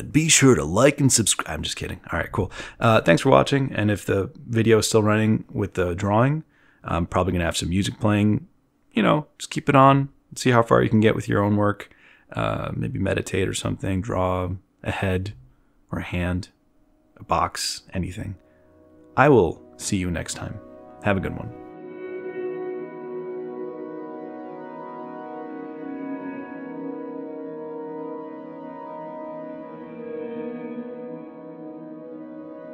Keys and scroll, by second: 0.0 t, 1.0 b, 18.9 z, 19.6 z, 19.8 b.